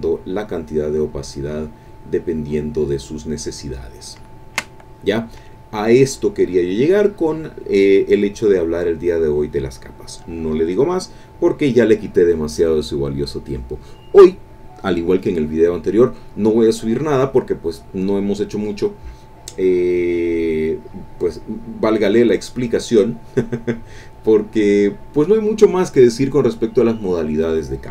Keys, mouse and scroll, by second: 0.2 click, 0.8 click, 1.4 click, 2.4 click, 2.9 click, 3.3 click, 4.3 ctrl+click, 4.9 ctrl+click, 5.8 click, 20.4 click, 21.9 click, 22.3 click, 23.1 click, 25.8 click.